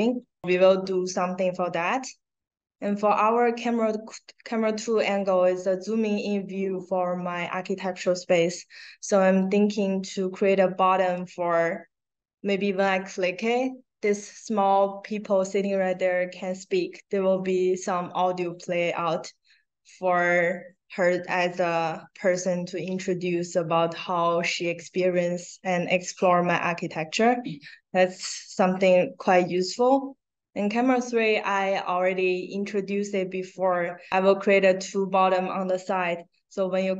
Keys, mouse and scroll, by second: 2.7 click, 29.4 click.